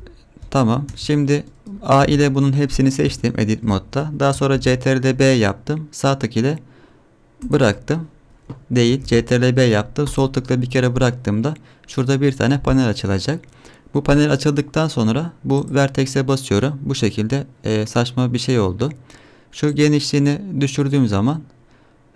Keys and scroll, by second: 0.9 Tab, 2.0 a, 4.5 ctrl+b, 9.0 ctrl+b.